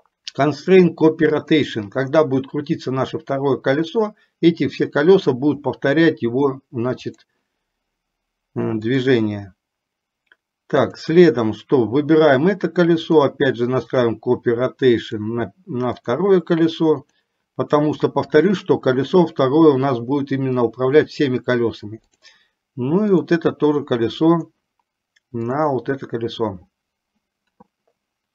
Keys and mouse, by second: 7.2 click, 11.0 click, 13.3 click, 15.2 click, 17.2 click, 22.3-23.6 drag.